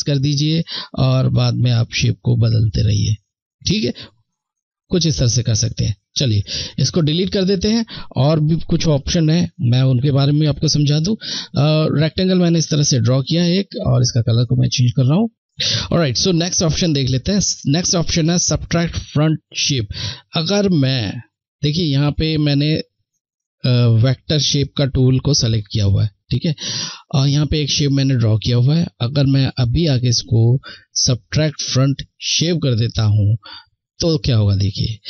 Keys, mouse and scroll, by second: 4.2 click, 11.2 click, 13.2 click, 16.0 click, 33.4 click.